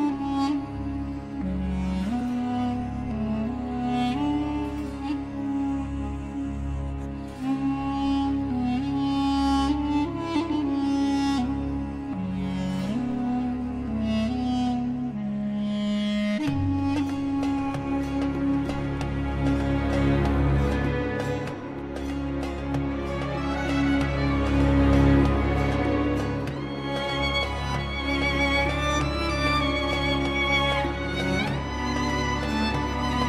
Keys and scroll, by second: 4.8 c, 5.1 e, 5.5 Escape, 10.5 ctrl+Page_Down, 18.1 KP_Add, 19.2 c, 19.4 e, 19.7 Escape, 21.7 KP_Add, 23.3 c, 23.6 e, 24.6 Escape, 29.2 F3, 30.0 F4.